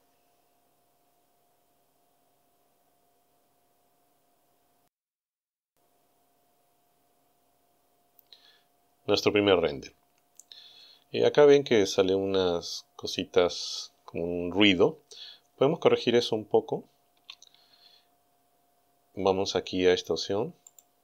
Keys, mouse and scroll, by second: 17.2 Escape, 20.7 click.